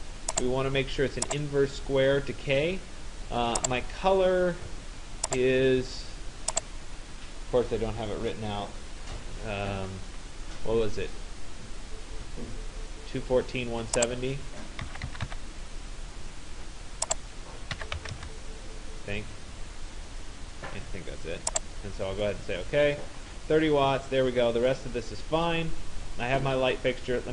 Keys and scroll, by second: 14.4 2, 15.3 4, 17.5-18.6 typing.